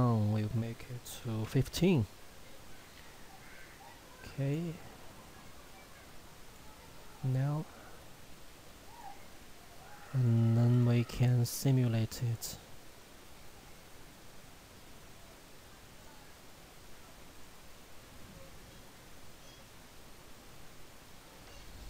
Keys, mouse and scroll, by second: 2.4 click, 15.9 click, 20.2 scroll up 1, 21.4 shift+middle click.